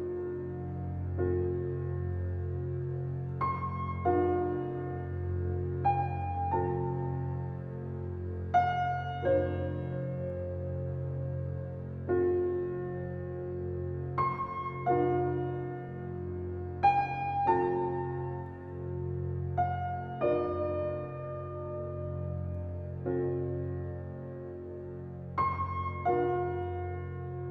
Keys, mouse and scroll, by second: 1.2-3.6 shift+middle drag, 3.6 alt+KP_0, 6.9-7.9 right drag, 7.9-9.4 drag, 9.4 n, 10.2 click, 10.7 click, 10.9-11.3 scroll down 1, 11.3-17.1 shift+middle drag, 17.1 click, 17.6 n, 18.2 click, 18.9 s, 20.7 Tab, 21.1 click, 21.9 e, 24.3 click, 25.5 ctrl+b, 27.3 Tab.